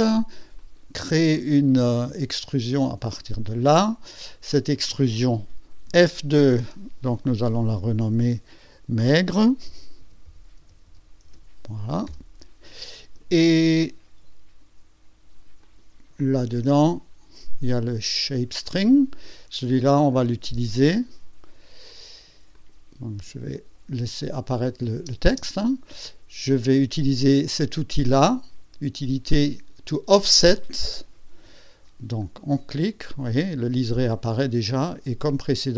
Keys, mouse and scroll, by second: 0.6 click, 2.3 click, 4.7 click, 5.9 F2, 6.5 click, 8.1 -, 9.4-11.8 typing, 12.1 Return, 15.6 click, 18.6 click, 20.4 space, 22.5 click, 22.9 click, 23.2 space, 24.4 click, 25.0 space, 32.2 click, 32.6 click, 34.4-35.3 scroll down 2, 35.6-35.7 scroll down 1.